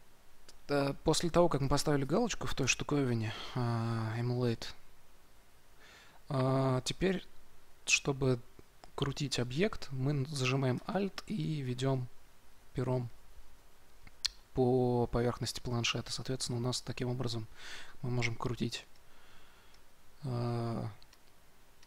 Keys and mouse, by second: 11.3-21.8 middle drag.